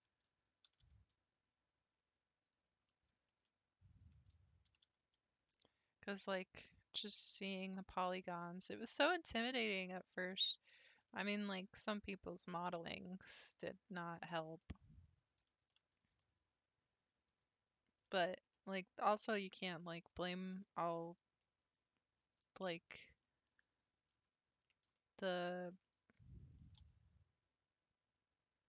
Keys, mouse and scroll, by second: 0.7 g, 2.9-3.9 middle drag, 3.9 click, 4.7 g, 7.7-9.8 middle drag, 9.8 click, 10.8 g, 14.6-19.2 middle drag, 19.6 click, 20.5-22.3 shift+middle drag, 22.3 click, 23.6 middle click, 24.5 ctrl+click, 25.0-26.2 middle drag, 26.2 typing.